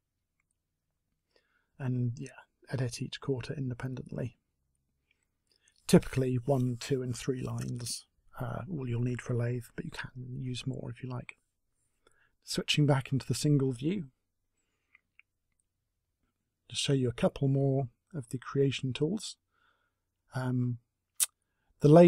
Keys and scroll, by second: 15.8 Delete.